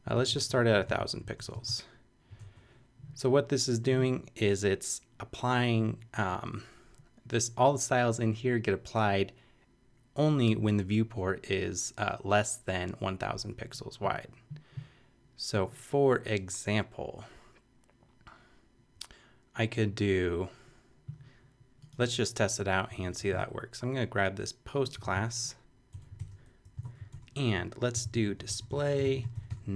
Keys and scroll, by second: 0.0-1.5 typing, 2.4 shift+Return, 3.4 Return, 22.6 Up, 23.0 shift+super+Left, 23.2 shift+super+c, 24.1 super+c, 25.0 super+v, 26.1 super+Return, 26.3 shift+], 26.6 shift+Up, 26.8 super+Right, 27.1 super+Return, 27.7-29.7 typing.